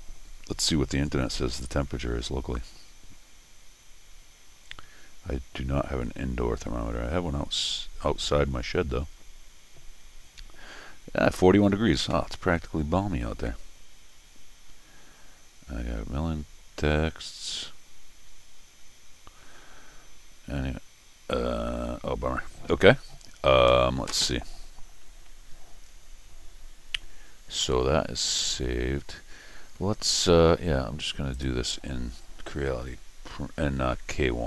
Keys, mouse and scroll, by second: 31.3 click.